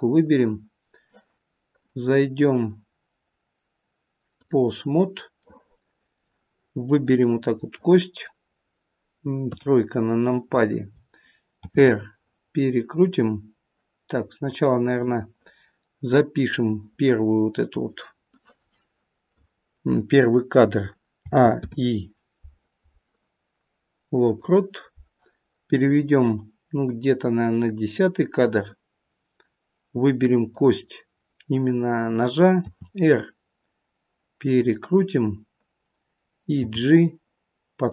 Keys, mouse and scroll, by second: 24.0 click.